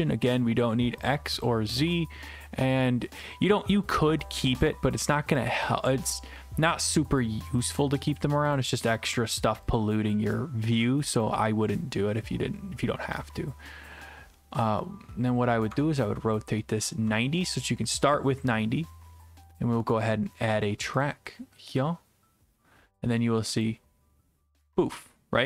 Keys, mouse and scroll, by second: 1.1 click, 1.4 click, 6.6 click, 7.2 right click, 8.1 right click, 8.6 click, 10.1 click, 11.2 click, 16.9 ctrl+click, 19.9 right click, 20.5 right click, 21.5 click, 23.7 click.